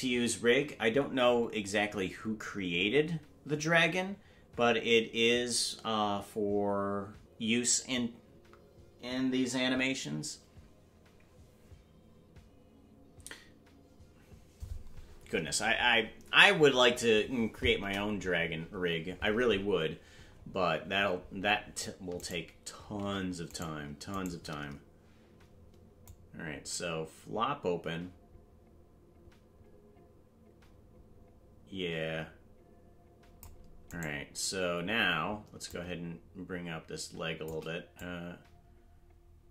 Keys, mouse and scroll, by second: 17.8 KP_0, 22.2 right click, 23.1 ctrl+Tab, 23.7 right click, 26.0-33.4 drag, 26.0 right click, 35.6-37.5 shift+drag, 35.6 right click, 37.9-39.5 drag.